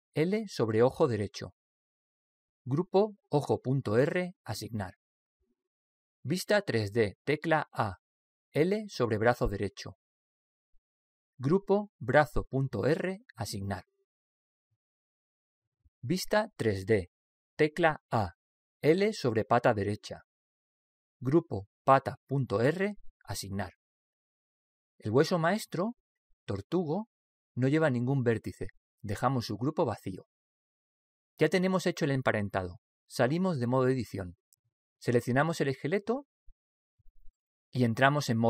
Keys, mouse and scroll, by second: 2.0 l, 3.5-6.9 drag, 8.0 a, 9.8 l, 12.3-15.6 drag, 18.3 a, 20.0 l, 22.3-25.5 drag, 34.9 Tab, 35.5-36.6 middle drag, 36.6 right click.